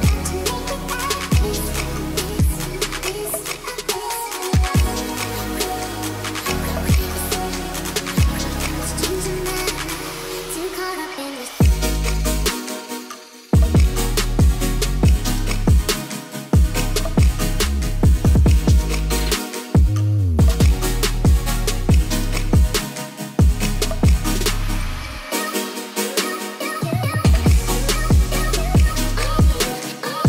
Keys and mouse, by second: 0.5 ctrl+s, 1.1 middle drag, 3.3 click, 4.5 middle click, 5.1 click, 5.9-8.9 drag, 11.8 click, 13.8 click, 16.5 ctrl+s, 17.2 click, 17.8 middle drag, 18.3-18.7 middle drag, 19.0 click, 19.9-24.1 drag, 24.8 ctrl+s, 25.6 middle drag, 25.9 click, 26.6 middle drag, 27.1 middle click, 27.7 shift+middle drag, 28.4 click.